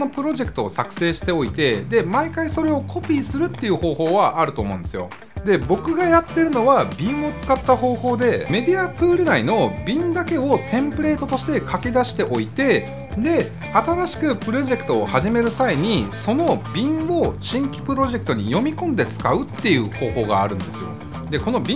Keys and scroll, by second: 6.3 Return.